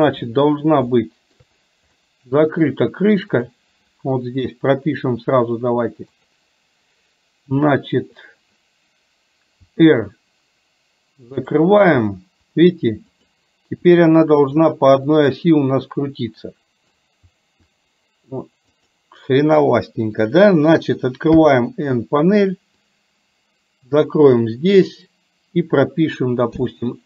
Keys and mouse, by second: 1.1 shift+middle click, 1.9 middle click, 3.4 click, 6.2 click, 9.7 r, 12.2 r, 13.9 r, 15.2-17.1 middle drag, 17.4 r, 21.4 n, 22.9-24.4 drag, 26.6 i.